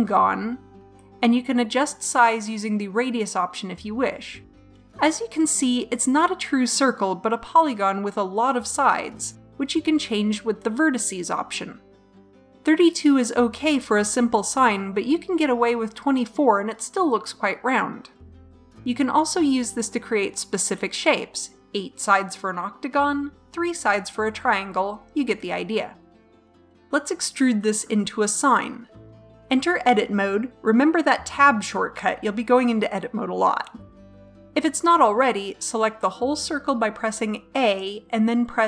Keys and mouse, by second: 2.4-3.5 drag, 10.8-16.3 drag, 21.0 click, 22.5 middle click, 23.5 click, 24.9 middle click, 25.8 click, 29.9 Tab, 36.5 click.